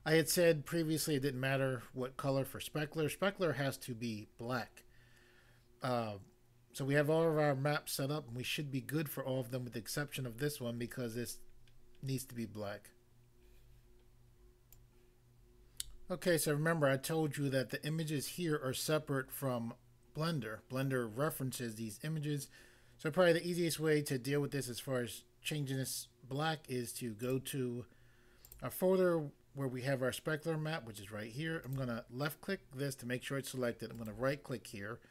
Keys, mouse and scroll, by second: 14.7 click, 27.3 click, 28.5 click, 28.7 click, 31.6 click, 33.9 right click.